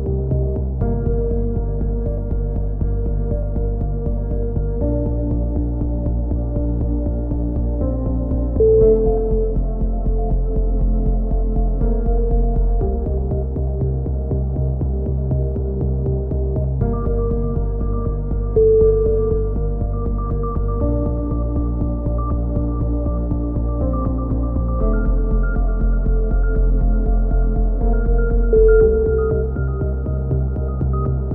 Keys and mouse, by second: 0.5 click, 0.5 right click, 0.9 KP_3, 1.6 click, 2.3 click, 2.3 right click, 2.5 KP_3, 2.8 click, 4.3-5.6 drag, 4.3 a, 5.6 right click, 8.1 e, 10.3 click, 10.3 KP_7, 11.1 click, 12.2 click, 12.4 a, 12.9 click, 12.9 z, 13.3 KP_3, 15.5 z, 15.7 c, 15.9 click, 16.1 right click, 17.4 click, 19.2 a, 19.3 z, 19.5 click, 19.8 right click, 20.1 KP_3, 20.6 g, 22.1-23.5 drag, 23.5 e, 24.7 KP_7, 25.1 click, 26.5 click, 27.1 right click, 27.7 click, 28.6 a, 28.8-30.7 drag, 30.7 right click, 30.7 f.